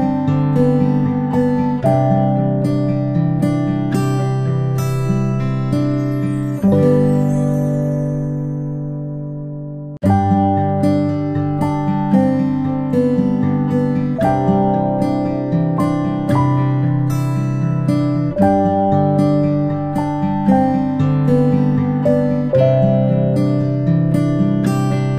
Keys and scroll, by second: 0.0 p, 3.2 space, 13.8 ctrl+y, 17.9-18.2 space, 18.8 p.